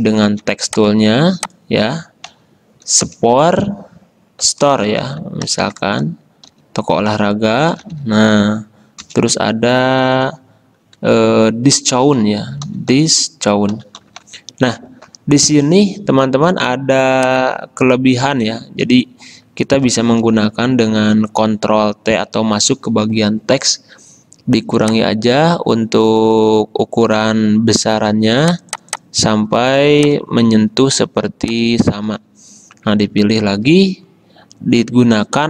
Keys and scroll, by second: 2.4 Right, 3.2 Return, 4.6-8.6 typing, 9.1 Return, 12.3-14.9 typing, 20.5 ctrl+t, 33.3 ctrl+a.